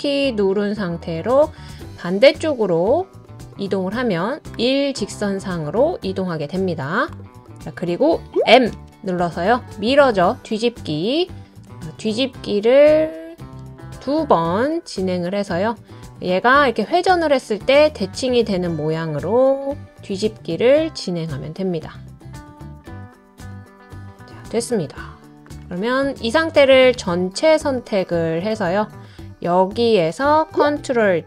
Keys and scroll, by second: 8.7 m, 30.5 ctrl+d.